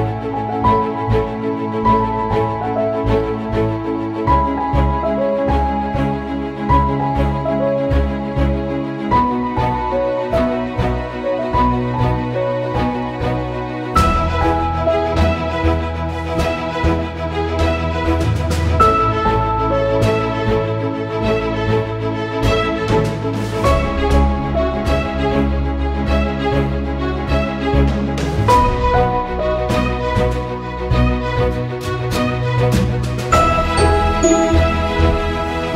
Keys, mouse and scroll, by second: 1.2-11.0 drag, 2.7 typing, 11.9-14.0 drag, 11.9 typing, 14.0 typing, 14.4 click, 16.9-20.9 drag, 24.1-27.2 drag, 30.1 click, 32.4-35.7 drag.